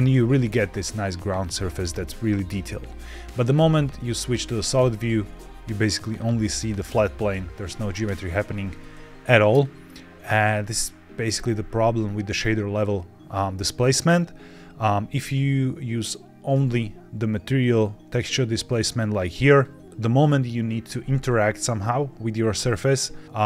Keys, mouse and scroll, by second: 1.8 scroll down 2, 3.4 z, 5.1-6.5 scroll down 2, 9.4 click, 17.3 click, 19.2 click.